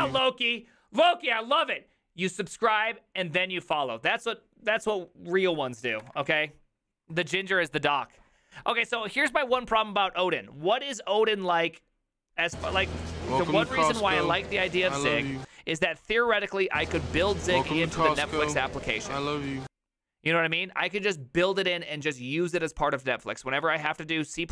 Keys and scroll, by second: 6.0 alt+f.